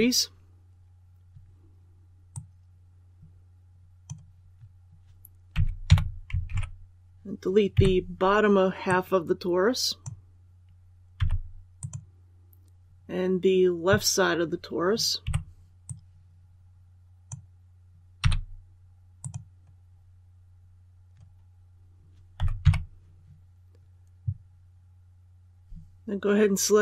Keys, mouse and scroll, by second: 2.2-3.9 drag, 5.4 z, 5.8 KP_4, 6.4 alt+a, 7.6 b, 8.8-10.5 drag, 11.1 x, 11.7 click, 15.1 b, 15.8-17.5 drag, 18.1 x, 19.1 click, 22.3 z, 22.5 KP_6.